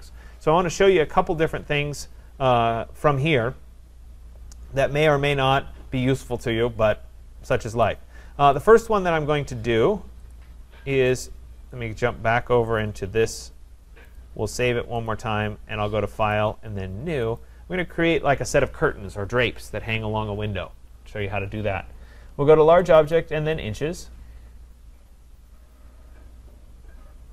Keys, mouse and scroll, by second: 7.9 click, 8.7 click, 10.3 click, 12.9 click, 14.2 click, 15.1 click, 16.3 click, 17.4 click, 23.3-24.3 drag.